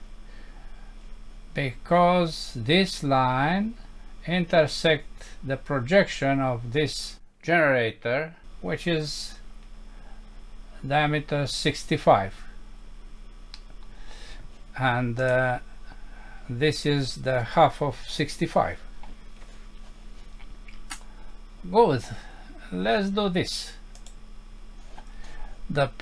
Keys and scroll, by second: 13.6 Home.